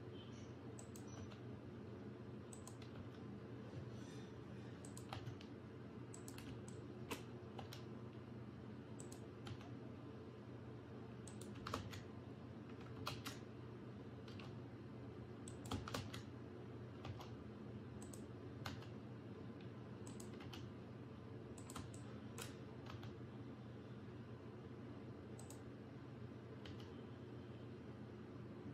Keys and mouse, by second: 1.2 e, 3.0 e, 5.2 e, 6.7 shift+click, 7.6 e, 11.8 ctrl+z, 13.1 ctrl+shift+z, 14.4 g, 16.0 ctrl+z, 17.1 g, 18.7 e, 20.5 e, 22.0 alt+shift+click, 23.0 e, 26.7 e.